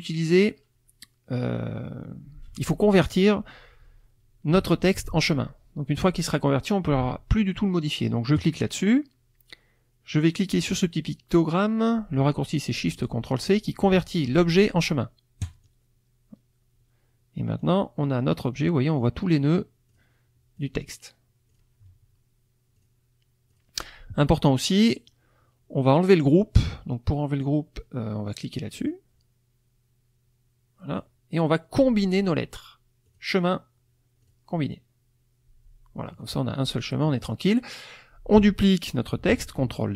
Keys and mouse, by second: 8.4 click, 15.4 click, 17.6 click, 18.6 click, 19.2 click, 19.9 click, 20.6 click, 21.5 click, 22.8 click, 23.5 click, 28.7 click, 33.1 click, 34.2 click, 36.0 middle click, 37.1 middle click.